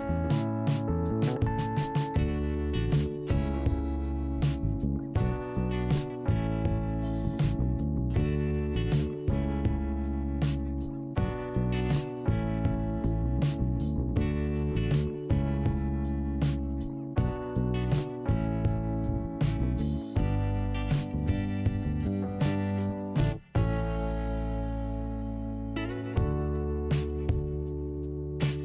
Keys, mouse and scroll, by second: 2.5 click, 2.6 click, 3.6 click, 3.7 click, 4.7 click, 6.5 click, 7.4 click, 7.4 click, 7.8 click, 7.8 click, 9.4 click, 9.5 click, 9.8 click, 9.8 click, 10.8 click, 10.9 click, 11.9 click, 14.3 click, 18.8 click, 18.9 click, 20.5 click, 23.1 scroll down 2, 24.7 click, 27.1 scroll down 1, 27.6 scroll up 1.